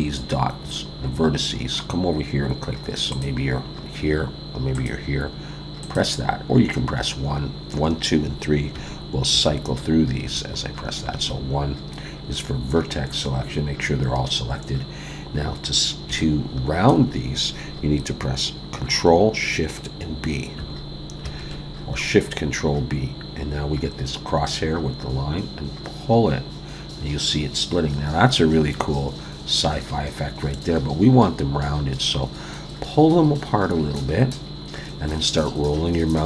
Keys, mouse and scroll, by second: 3.1 click, 4.7 click, 5.8 click, 8.7 1, 9.3 2, 10.2 3, 11.1 1, 12.0-12.4 scroll up 1, 16.2 shift+middle click, 21.2 ctrl+shift+b.